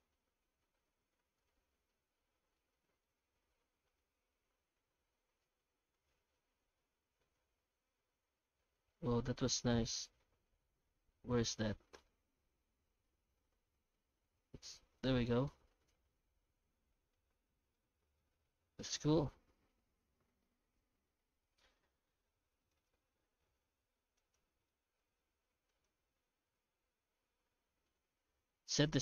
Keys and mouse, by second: 1.9 middle click, 3.0-4.0 middle drag, 4.2 F9, 16.4 middle click, 18.0-19.7 middle drag, 22.1 shift+middle click, 22.7 right click, 23.0 Tab, 23.7 alt+a, 24.2 right click, 24.7 shift+middle click, 25.7 shift+right click, 26.1 q, 27.0 Tab, 27.6 shift+q.